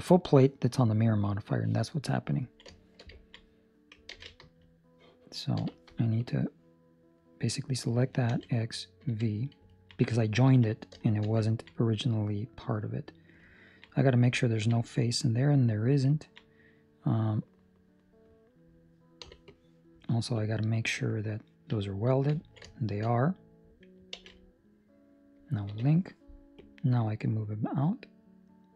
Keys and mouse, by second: 0.6 middle click, 2.5 ctrl+middle click, 2.7 shift+middle click, 3.2 ctrl+middle click, 4.0 alt+a, 4.4 Escape, 5.5 b, 9.6 x, 9.6 ctrl+middle click, 9.9 middle click, 10.9 shift+middle click, 11.4 ctrl+middle click, 11.7 middle click, 12.7 middle click, 12.8 shift+middle click, 13.7 middle click, 13.7 ctrl+middle click, 13.8 middle click, 14.3 ctrl+middle click, 14.7 middle click, 15.5 middle click, 15.8 ctrl+middle click, 16.1 ctrl+middle click, 16.4 middle click, 19.2 b, 20.3 click, 20.8 click, 22.4 ctrl+middle click, 22.6 shift+middle click, 23.1 middle click, 24.1 alt+a, 25.6 l, 26.5 click.